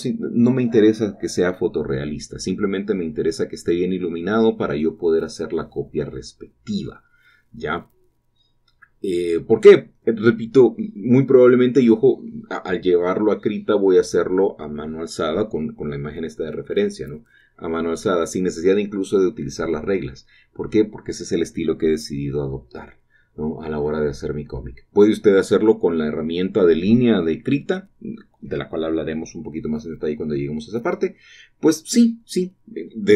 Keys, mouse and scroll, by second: 0.1 ctrl+z, 0.4 typing, 0.4 shift+middle click, 0.9 click, 1.5 typing, 2.6 shift+click, 3.2 click, 3.3-3.6 typing, 5.9 scroll down 1, 6.1 shift+middle click, 7.0 typing, 8.8 shift+click, 9.2-10.0 typing, 9.3 click, 11.1 shift+click, 13.1 click, 13.8 shift+click, 14.2 shift+click, 15.0 typing, 15.4 click, 15.6-16.4 scroll down 1, 16.0-16.7 typing, 18.1 shift+click, 18.8 typing, 21.1-21.6 shift+drag, 21.6-21.9 shift+middle drag, 22.2 click, 24.2 shift+click, 24.6 click, 24.6-25.3 typing, 26.4 shift+click, 27.6-28.9 typing, 27.9 shift+click, 30.7 shift+click, 32.9 shift+click, 32.9-33.1 typing.